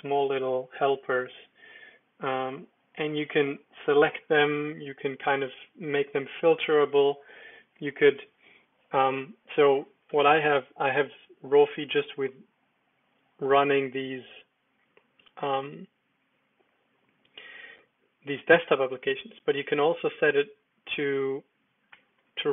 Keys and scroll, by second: 10.6 super+d, 12.6 Down, 13.3-14.1 Down, 14.5 Down, 14.6 Down, 16.8 Down, 17.0 Down, 17.2 Down, 17.3 Down, 18.0 Up, 18.3 Up, 18.4 Up, 18.5 Up, 22.0 ctrl+Tab, 22.2 ctrl+Tab.